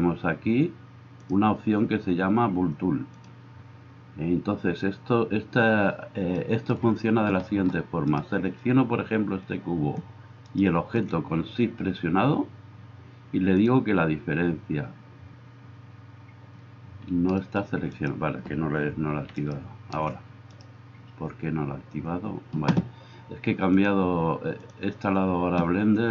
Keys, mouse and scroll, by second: 0.0-1.3 drag, 1.3-3.1 middle drag, 3.1-26.1 drag, 10.5 middle click, 10.5 right click, 17.9 right click, 19.3 right click, 20.5-24.8 right drag.